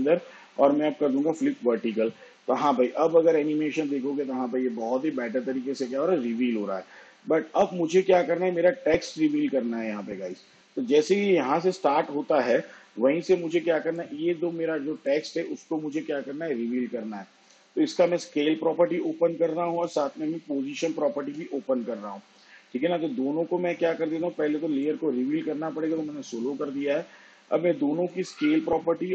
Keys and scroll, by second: 19.4 s, 22.8 shift+p.